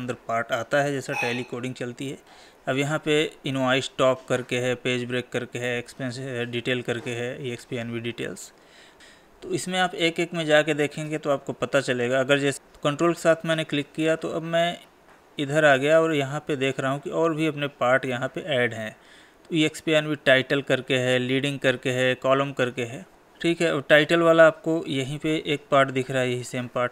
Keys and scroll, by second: 9.6 Tab.